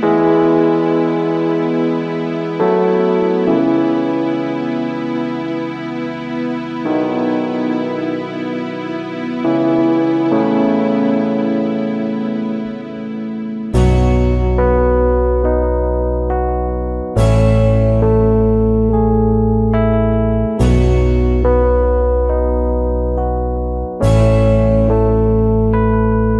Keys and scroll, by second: 6.5 space, 14.2 space.